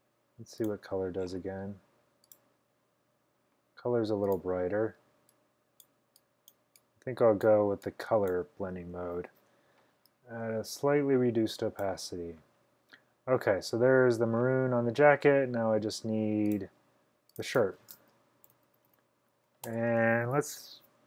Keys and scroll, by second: 18.2-19.4 typing, 19.7 Return.